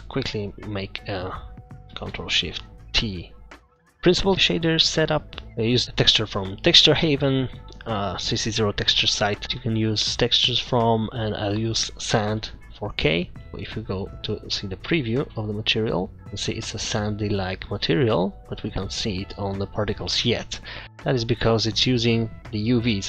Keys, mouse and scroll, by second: 0.0 scroll down 3, 0.2 middle click, 1.0 click, 13.5-13.8 scroll down 1, 14.3 click, 16.1 click, 20.4-20.8 scroll down 5, 20.8 middle click, 20.8 scroll up 4, 21.6 middle click, 21.9-23.0 scroll up 5.